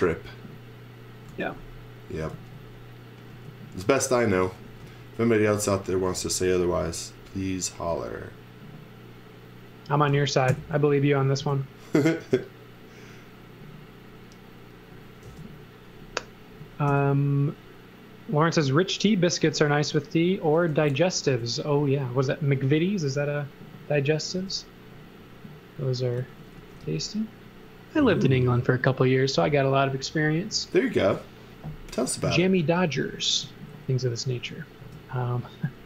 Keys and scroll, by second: 1.2 x, 2.3 z, 3.3 space, 4.4 x, 4.8 v, 5.5 space, 6.7 m, 10.4 Right, 11.4 Left, 15.2 space, 16.8 m, 20.7 s, 24.3 m, 25.9-27.3 typing, 33.4 z, 34.7 space.